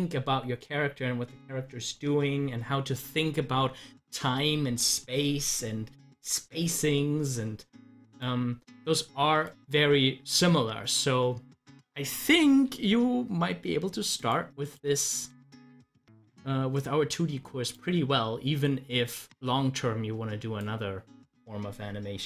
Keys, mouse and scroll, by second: 2.0 click, 3.9 scroll up 1, 8.1 click, 10.3 scroll up 1, 14.2 click, 16.8-22.2 drag.